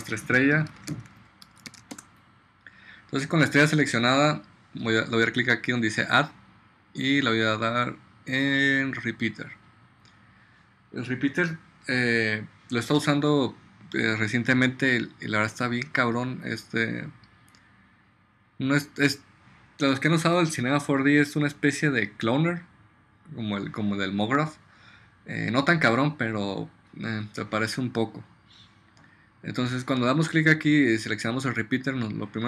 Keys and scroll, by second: 0.0 Return, 0.4-2.3 typing.